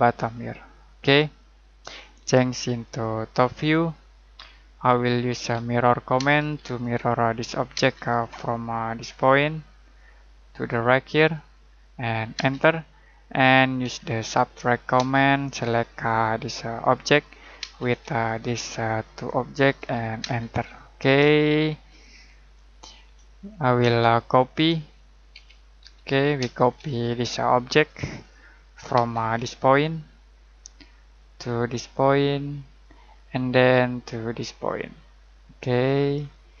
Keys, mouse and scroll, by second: 4.4-4.8 scroll down 1, 4.8 middle click, 5.2 m, 6.1 space, 6.7 click, 7.7 space, 7.9-9.8 scroll up 1, 9.8 click, 11.3 click, 12.3 space, 13.3-13.8 scroll down 1, 13.8-14.9 typing, 16.7 click, 17.5 space, 17.8 click, 20.2 space, 20.7 middle click, 21.3 shift+middle click, 23.8 shift+middle click, 25.3-26.3 typing, 26.9 click, 28.1-28.9 scroll up 1, 28.9 space, 29.2-29.5 scroll up 1, 30.5 click, 30.8-31.2 scroll down 1, 31.2 middle click, 31.5-32.8 scroll up 1, 32.8 click, 33.1-33.4 scroll down 1, 33.4 middle click, 33.9 scroll up 1, 36.1-36.6 scroll down 1.